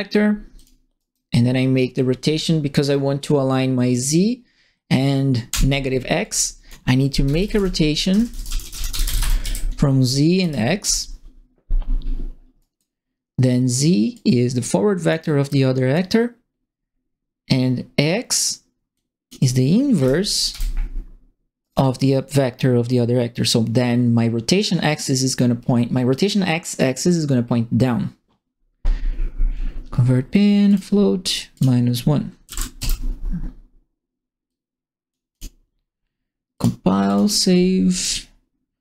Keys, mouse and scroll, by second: 0.5 click, 0.9 right click, 3.9 click, 5.4 Delete, 6.2 click, 6.9-10.3 typing, 10.8 Return, 12.5 right click, 14.1 click, 15.4 click, 18.9 click, 19.9 KP_Multiply, 20.5 Return, 21.6 right click, 30.6 click, 31.5 click, 32.4 KP_Subtract, 32.7 KP_Enter, 34.4 click, 35.3 click, 36.5 click, 37.0 click, 37.9 click.